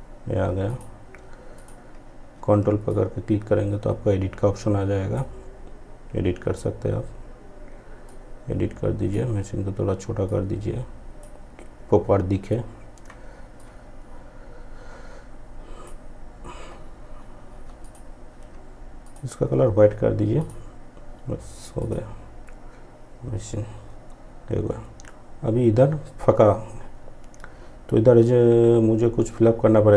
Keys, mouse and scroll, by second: 7.0-12.6 shift+drag, 12.6-16.8 drag.